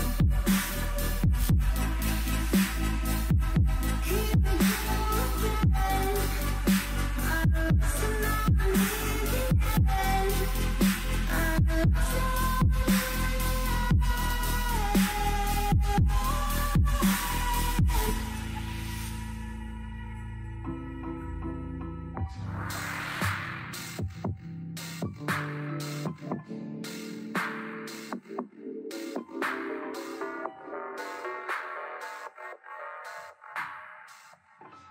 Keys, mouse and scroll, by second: 1.1-2.7 scroll up 2, 2.8 shift+a, 4.4 Tab, 5.7 KP_1, 6.7 click, 7.4-9.0 drag, 9.7-10.3 scroll down 1, 10.3 g, 13.4 click, 13.9 g, 16.2 3, 16.8 middle click, 17.7 click, 18.0 middle click, 18.8 x, 19.9-24.0 typing, 23.1-23.4 scroll up 1, 24.8-25.4 scroll up 1, 25.4 s, 26.1 shift+middle click, 26.4-26.9 scroll up 2, 26.9 g, 27.9 1, 28.0 click, 28.6 g, 30.3 click, 30.6 g, 32.0 ctrl+r, 33.6 click, 34.0 g, 34.7 click.